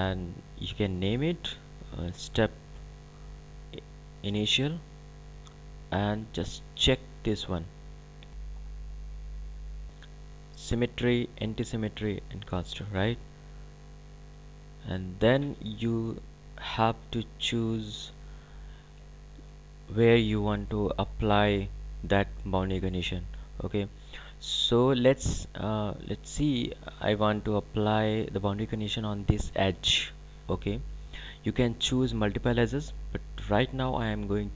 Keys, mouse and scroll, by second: 13.5 click, 30.9 click.